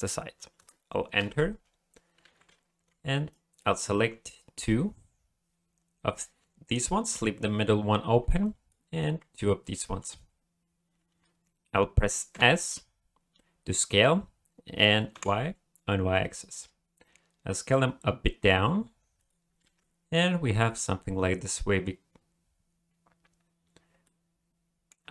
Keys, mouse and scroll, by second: 2.2 alt+a, 2.8 b, 3.9 b, 8.2 b, 9.0 b, 12.3 s, 19.6 alt+a, 24.0 middle click.